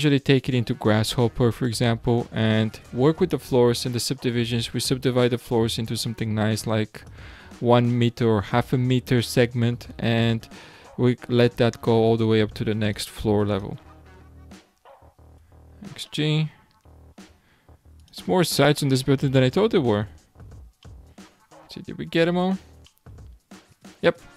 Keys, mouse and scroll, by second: 1.5 alt+click, 2.4 alt+shift+click, 5.8 x, 7.4-7.9 scroll down 3, 7.9-9.8 middle drag, 9.8-12.0 scroll up 4, 12.8 alt+click, 13.5 alt+shift+click, 14.1 x, 15.7-16.1 scroll down 3, 16.1-18.0 middle drag, 18.0 alt+click, 18.8 alt+shift+click, 19.5 x, 20.4 scroll down 5, 20.8-22.2 middle drag, 22.2-22.9 scroll down 2, 22.9-24.3 middle drag.